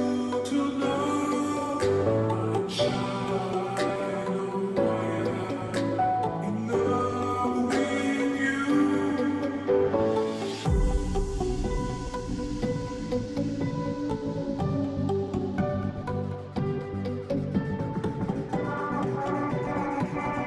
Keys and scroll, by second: 4.5 ctrl+z, 19.5-20.4 Right.